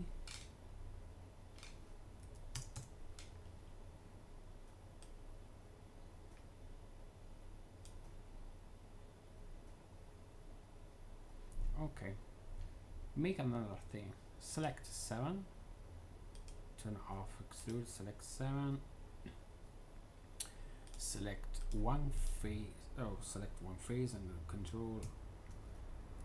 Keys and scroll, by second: 2.1 Tab, 2.1 3, 2.4 0, 2.6 Return, 24.9 a.